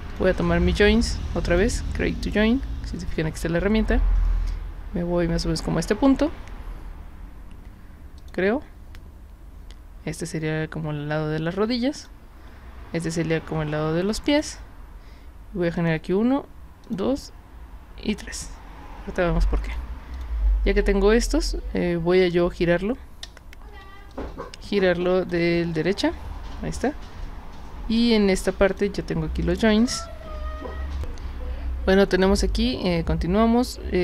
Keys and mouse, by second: 0.1 click, 1.4 click, 8.2 click, 12.0 click, 14.3 click, 15.8 click, 16.8 click, 18.1 click, 19.7 click, 20.2 drag, 23.3 space, 24.1-25.3 drag, 28.7 click, 30.9 click.